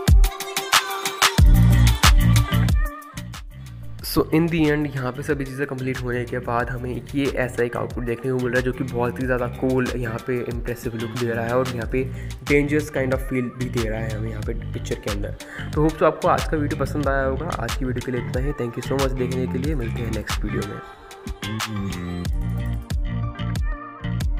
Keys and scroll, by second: 1.3 ], 2.9 ctrl+KP_0.